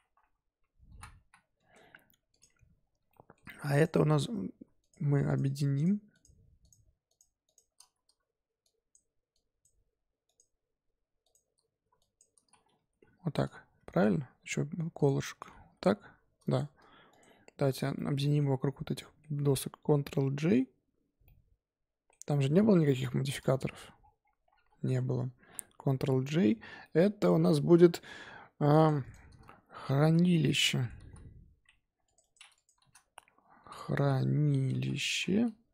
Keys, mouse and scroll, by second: 0.2 BackSpace, 2.3 click, 2.8 scroll down 2, 3.1-3.7 shift+middle drag, 3.7 click, 4.8 shift+click, 5.2 shift+click, 5.7 shift+click, 6.1 shift+click, 6.6 shift+click, 7.0 shift+click, 7.4 shift+click, 7.8 z, 8.6 shift+click, 9.3 shift+click, 10.2 shift+click, 11.2 shift+click, 11.9 shift+click, 12.4 z, 12.6 scroll down 3, 12.9 g, 14.1-14.5 scroll up 6, 14.9 shift+click, 15.3 scroll down 2, 15.6 g, 17.1 shift+click, 17.9-20.3 shift+middle drag, 20.3 ctrl+j, 21.2-22.9 middle drag, 22.9 ctrl+z, 23.4-24.4 scroll down 14, 24.4-25.9 scroll up 14, 25.9 ctrl+j, 26.8-29.9 middle drag.